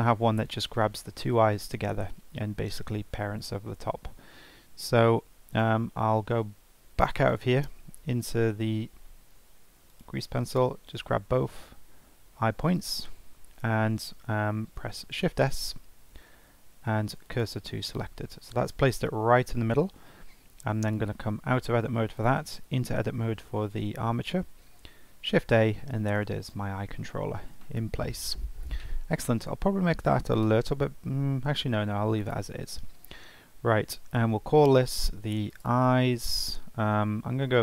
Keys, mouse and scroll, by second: 5.5 click, 6.9 Tab, 7.3 click, 7.5 Tab, 10.5-12.7 right drag, 12.7 shift+a, 14.8 shift+s, 21.1 Tab, 22.1 drag, 22.5 Tab, 24.8 shift+a, 26.4 click, 29.8 s, 34.6 F2.